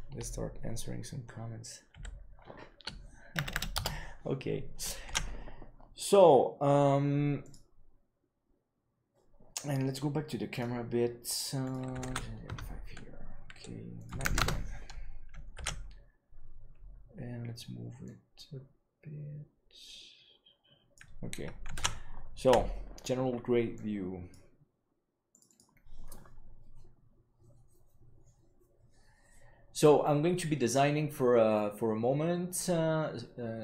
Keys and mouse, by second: 11.6-13.5 drag, 13.9 click, 15.7 ctrl+s, 18.0-20.9 drag, 21.9 ctrl+s, 22.5 F12.